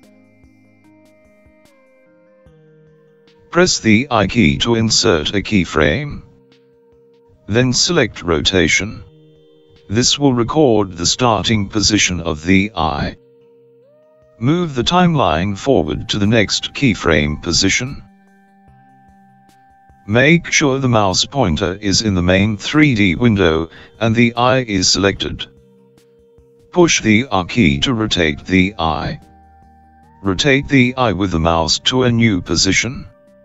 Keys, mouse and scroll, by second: 3.4 i, 15.9 click, 29.7 r.